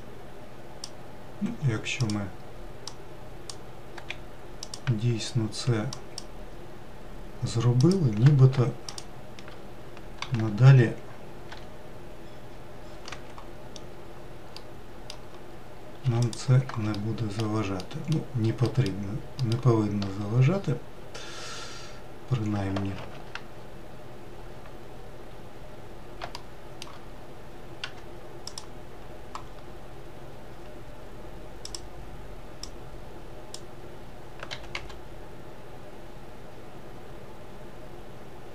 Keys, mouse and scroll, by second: 1.3 m, 2.7 click, 3.8 m, 5.8 click, 7.7 click, 8.7 shift+click, 10.1 g, 13.6 scroll up 1, 14.4-15.9 middle drag, 15.9 2, 16.1 click, 16.8 alt+middle click, 17.7 middle click, 19.3 alt+middle click, 20.1-20.8 scroll down 7, 21.3-22.1 scroll up 3, 22.8 alt+z, 23.4-24.0 scroll up 2, 25.2-25.5 scroll up 2, 26.2-27.7 shift+middle drag, 27.7 1, 28.4 click, 29.6-30.2 scroll up 1, 30.2 scroll up 1, 31.5 click, 32.5 click, 34.4 g.